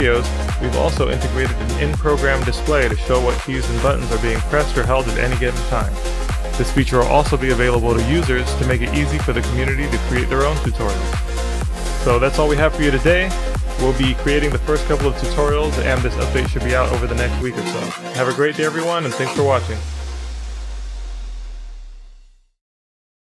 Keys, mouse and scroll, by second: 1.3 shift+t, 5.5 middle drag, 5.8 middle drag, 6.0 middle drag, 6.5 middle click, 8.2-11.5 shift+drag, 11.5-12.1 shift+middle drag, 12.1 middle click, 12.3-12.8 middle drag, 12.8-14.7 drag, 15.7 click, 17.1 Escape, 18.2 drag, 18.4 click.